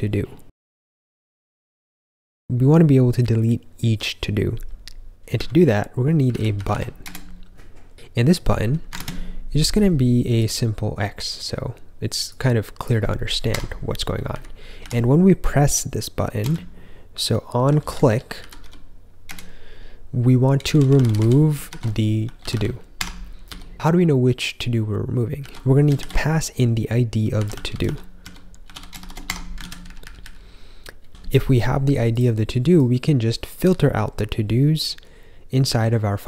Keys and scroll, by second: 5.3-7.2 typing, 8.9 ctrl+super+space, 13.4 Escape, 14.2-14.7 typing, 17.8-19.0 typing, 19.2 Return, 20.3-23.4 typing, 25.3 i, 25.9 (, 27.1-31.1 typing, 29.5 super+s.